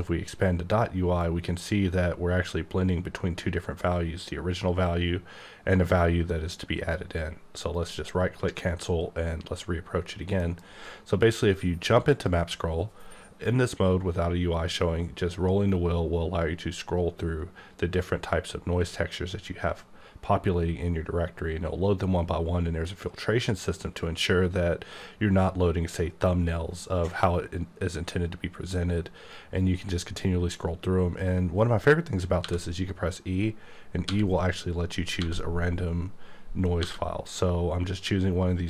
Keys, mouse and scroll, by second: 1.2 click, 7.6 right click, 10.4 alt+m, 12.1 click, 14.4-16.2 scroll up 1, 18.6-19.8 scroll up 3, 19.8-20.9 scroll up 1, 20.9-22.2 scroll up 1, 22.2-23.2 scroll up 1, 23.7-25.5 scroll up 1, 25.6-27.4 scroll up 1, 28.4-30.2 scroll up 2, 30.2-32.1 scroll up 1, 32.4 e, 34.0 e, 35.2 e, 36.8 e.